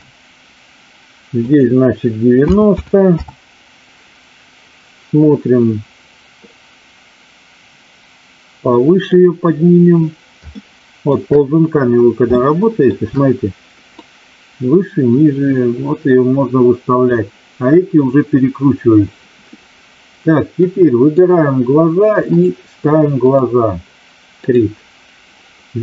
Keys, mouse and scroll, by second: 1.4-3.4 drag, 6.4-9.0 drag, 10.6 shift+middle click, 12.4-13.0 shift+middle drag, 13.9-17.0 drag, 20.5-21.2 drag, 22.4-23.5 drag.